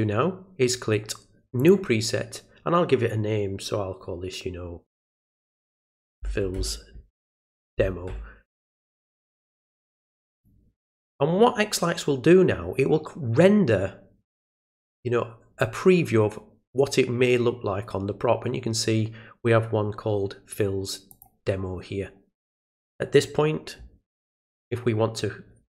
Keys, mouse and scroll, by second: 1.6 click, 10.3 click, 21.1 click.